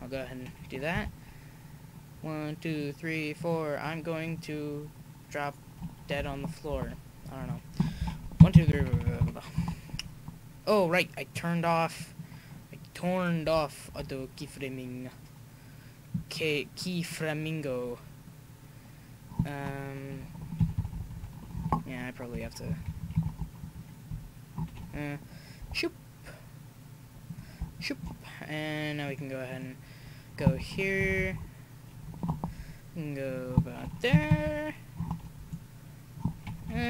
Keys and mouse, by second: 0.9 r, 3.4-6.4 right drag, 6.7 i, 8.4 Right, 8.5 Right, 12.0-16.2 drag, 13.4 r, 17.0-18.9 right drag, 20.6-20.9 Left, 21.2 Left, 21.6 i, 22.7 Right, 22.8 Right, 23.1 Right, 23.6 Right, 24.1 Left, 25.6 r, 29.1-31.0 middle drag, 31.0 Left, 32.4 i, 34.1 Right, 34.3 Right, 34.4 Right, 36.5 Right.